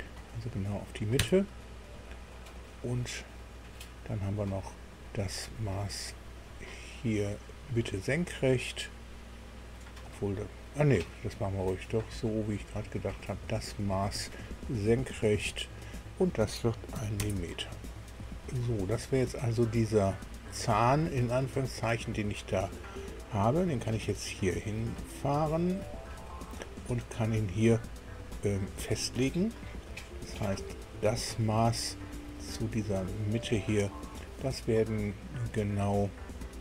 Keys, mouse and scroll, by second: 1.2 KP_Enter, 4.7 click, 7.4 click, 10.0 click, 12.2 click, 14.1 click, 15.4 click, 16.9 KP_1, 17.2 KP_Enter, 20.7-26.2 drag, 26.6-27.2 scroll up 2, 28.9 scroll down 1, 30.7 click, 31.2 scroll down 1, 31.8 shift+middle click, 33.3 click.